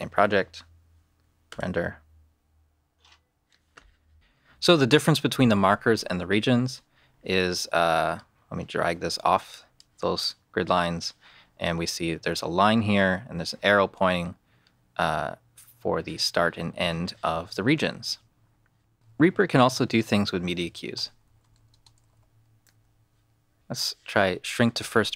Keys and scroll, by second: 18.9 shift+/, 20.7-22.7 typing.